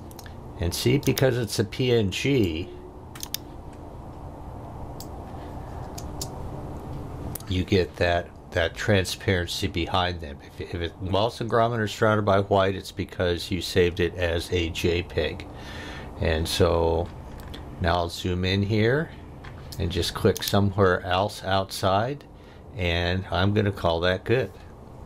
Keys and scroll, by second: 5.9 space.